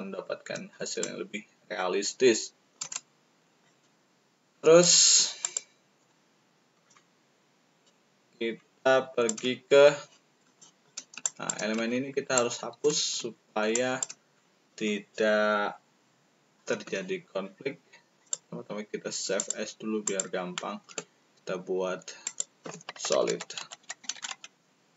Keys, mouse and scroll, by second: 1.0-2.7 shift+drag, 3.6-4.8 shift+drag, 5.3 click, 6.7-9.3 shift+drag, 10.5 shift+click, 11.2 shift+click, 12.3 shift+click, 13.7 shift+click, 13.7 shift+right click, 18.1 click, 18.1 right click, 19.3 click, 20.0 click, 22.2 click, 23.5 s, 24.2 d.